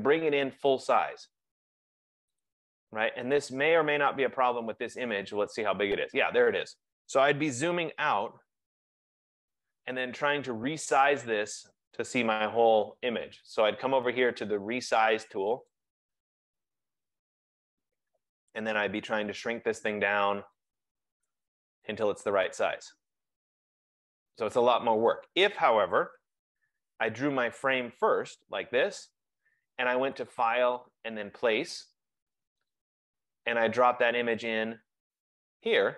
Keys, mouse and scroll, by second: 0.8 click, 2.5 click, 3.5 click, 4.3 click, 5.3 click, 8.6 ctrl+-, 8.8 ctrl+-, 8.9 ctrl+-, 15.8 click, 18.6 shift+click, 19.8 click, 21.4 click, 22.6 click, 25.2 click, 26.2 BackSpace, 28.3 click, 31.3 click, 35.4 click.